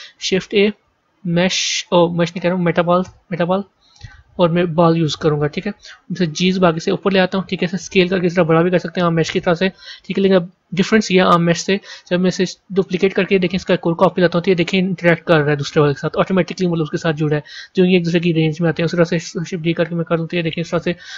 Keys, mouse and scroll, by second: 6.3 g, 7.6 s, 9.2-12.7 middle drag, 12.7 shift+d, 19.2 shift+d, 20.9-21.1 scroll down 1.